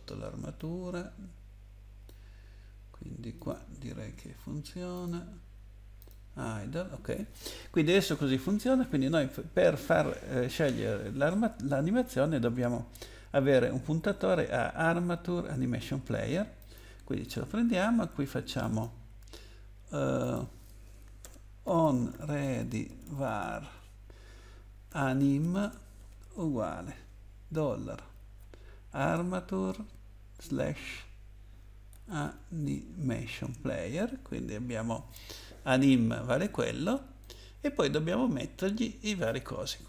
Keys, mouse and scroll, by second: 0.6 click, 3.5 click, 4.9 click, 6.0 click, 16.6 click, 18.6 click, 20.2 click, 21.2 Return, 21.6-26.5 typing, 27.5 shift+4, 28.2 shift+a, 29.0 Return, 30.4 /, 31.9-32.2 typing, 33.4 Return, 37.2 click, 38.1-39.4 scroll down 2.